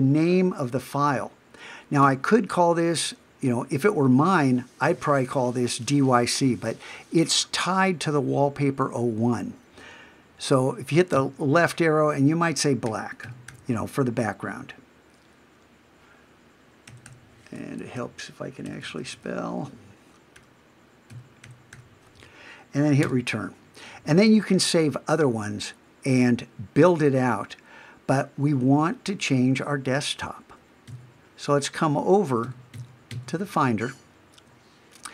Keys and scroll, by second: 30.9 super+Tab.